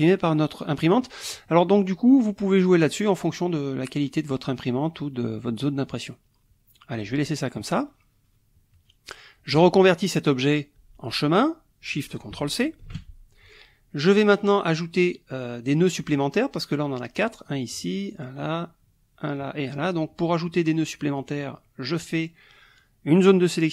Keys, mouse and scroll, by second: 2.4-7.1 drag, 12.8 ctrl+shift+c, 21.2-23.7 drag.